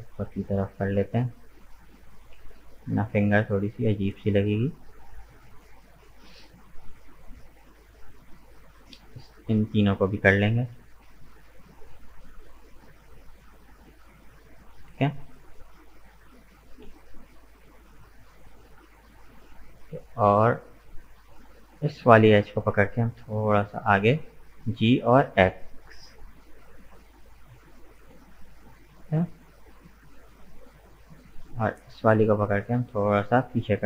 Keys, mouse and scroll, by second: 0.9-3.3 middle drag, 3.3 right click, 3.8-6.8 middle drag, 6.8 shift+right click, 7.1-8.9 middle drag, 8.9 shift+right click, 9.3-10.5 middle drag, 10.5 g, 12.4-15.4 middle drag, 15.6 right click, 15.8-18.9 middle drag, 20.7 click, 21.5 right click, 21.9-23.4 middle drag, 23.4 g, 28.8-32.0 middle drag, 32.0 right click, 32.4 scroll down 1, 32.4-33.6 middle drag, 33.6 g.